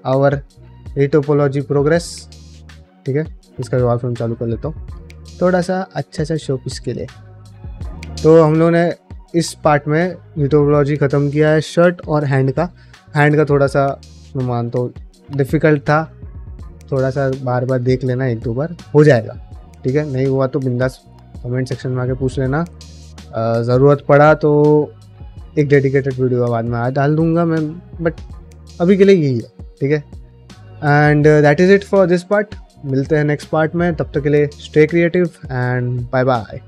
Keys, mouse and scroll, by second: 0.1 ctrl+middle click, 0.5 ctrl+space, 0.9 shift+middle click, 1.4 ctrl+middle click, 1.7 shift+middle click, 2.7 click, 3.0 q, 5.2 click, 5.6 q, 6.7 drag, 7.2 shift+middle click, 7.8 ctrl+middle click, 8.0 shift+middle click, 8.3 shift+middle click, 8.6 middle drag, 9.1 shift+middle click, 9.4 ctrl+shift+middle click, 9.7 shift+middle click.